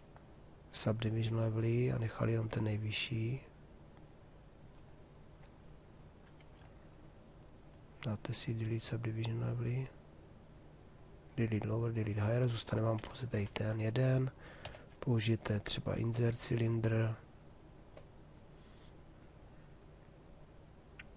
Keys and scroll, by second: 0.9 1, 2.2 2, 6.0 ctrl+2, 8.3 2, 14.2 b.